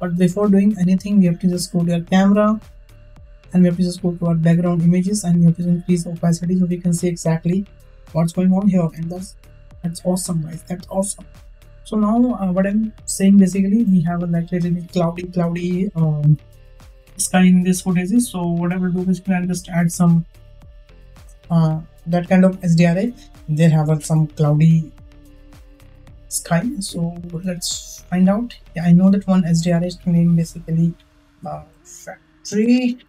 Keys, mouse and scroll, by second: 1.6 click, 2.5 click, 2.9 click, 4.1 click, 5.8-6.3 drag, 8.1-8.8 shift+middle drag, 18.6 click, 19.3-32.9 drag.